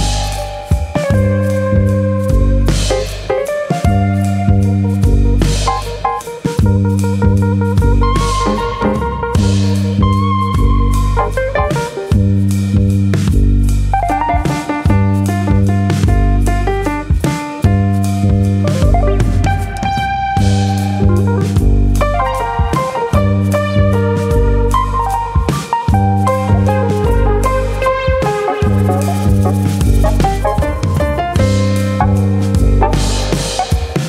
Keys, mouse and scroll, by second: 1.0 middle click, 1.6 alt+click, 2.3 alt+click, 3.5 g, 4.0 click, 4.0 middle click, 6.1 ctrl+r, 6.1 right click, 6.2 s, 7.2 click, 7.9 ctrl+r, 8.6 right click, 8.9 s, 9.7 click, 9.8 middle click, 11.1 click, 11.6 click, 13.3 click, 14.7 click, 17.0 click, 17.0 middle click, 17.5 click, 17.8 middle click, 18.5 click, 20.6 middle click, 21.4 click, 22.6 click, 23.4 shift+e, 24.8 click, 25.9 middle click, 26.0 middle click, 26.4 shift+middle click, 27.0 shift+middle click, 27.4 KP_7, 28.3 KP_7, 29.1 scroll up 2, 29.4 shift+middle click, 30.2 alt+click, 31.3 click, 33.5 alt+click.